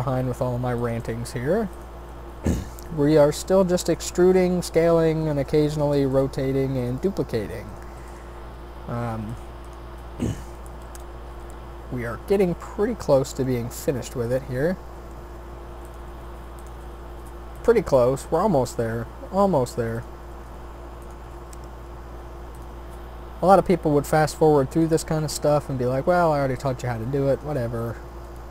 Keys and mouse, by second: 1.0 g, 2.1 e, 4.2 s, 6.1 g, 10.8 shift+d, 11.9-14.4 drag, 12.9 r, 14.8 e, 16.0 s, 16.7 e, 18.8 e, 20.3 s, 21.2 e, 23.3 e, 25.0 s, 27.3-28.5 drag, 28.4 shift+d.